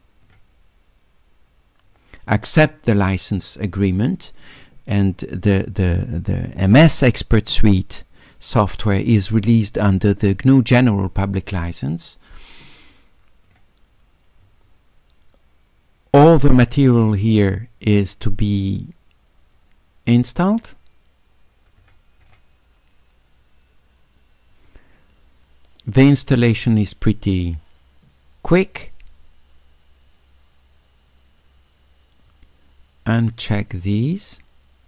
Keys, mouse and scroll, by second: 0.2 click, 2.3 click, 2.9 click, 13.5 click, 20.6 click, 22.2 click, 33.4 click, 33.9 click.